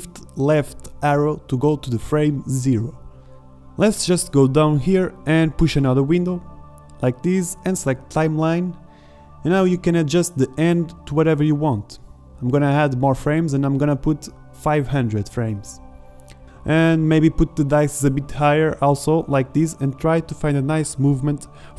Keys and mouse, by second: 14.5 KP_0, 15.4 middle click.